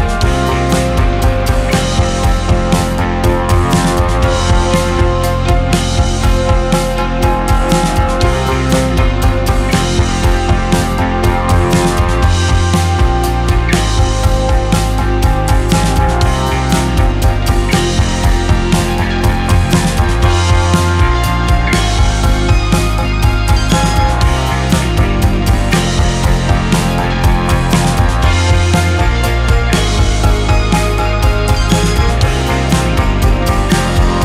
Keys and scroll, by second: 5.5-6.3 typing, 6.5 Return.